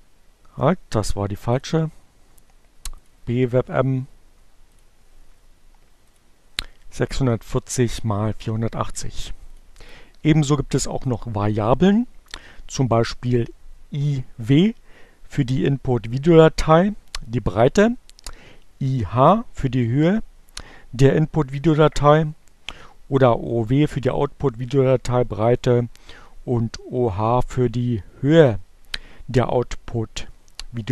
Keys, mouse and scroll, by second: 0.2 click, 2.9 click, 4.4 click, 4.8 right click, 5.8 click, 7.7 click, 10.2 click, 11.2 click, 27.8 Up, 30.0 Left.